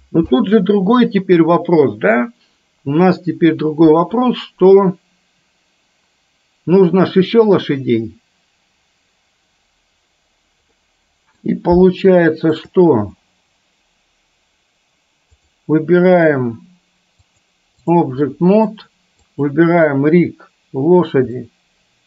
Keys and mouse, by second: 10.8 middle click, 12.2-12.7 shift+middle drag, 17.6 click, 18.3-18.8 middle drag, 19.3 click, 21.4-22.0 shift+middle drag.